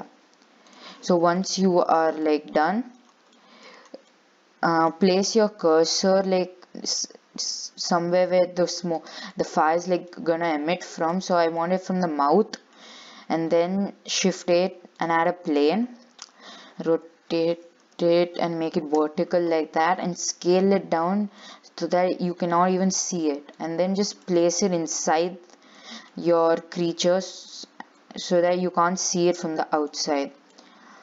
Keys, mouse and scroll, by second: 0.9 click, 1.4 scroll up 4, 1.6 middle click, 2.1-2.5 scroll down 5, 2.5 middle click, 3.2-3.6 scroll up 5, 3.6 shift+middle click, 4.0-4.3 scroll up 4, 4.3-5.7 middle drag, 5.7-7.2 scroll up 1, 7.2 shift+right click, 7.4 scroll up 3, 7.7-9.3 middle drag, 9.3 scroll up 2, 9.5-11.3 middle drag, 11.3 shift+right click, 11.8-13.8 middle drag, 13.8 shift+a, 15.8 scroll down 1, 17.1 r, 20.2 s, 21.9 scroll up 1, 22.0 middle click, 22.8 scroll up 2, 23.7 click, 25.1 click, 26.3 scroll up 1, 26.3 middle click, 26.8 scroll up 1, 27.1 scroll down 4, 27.3 shift+middle click, 28.0 scroll up 2, 28.2-29.2 middle drag, 29.2 click, 30.7 click.